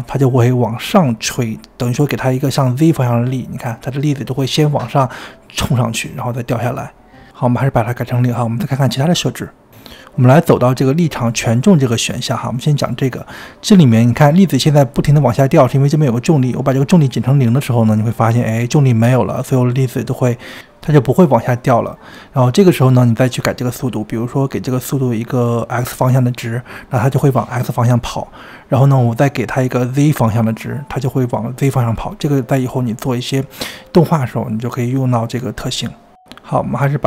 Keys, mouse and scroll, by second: 2.9-4.3 scroll down 1, 4.3-7.0 shift+middle drag, 7.0-9.7 drag, 10.2-14.9 drag, 14.9-16.2 scroll down 2, 16.2-19.2 drag, 24.1-29.4 drag, 32.1-35.1 drag.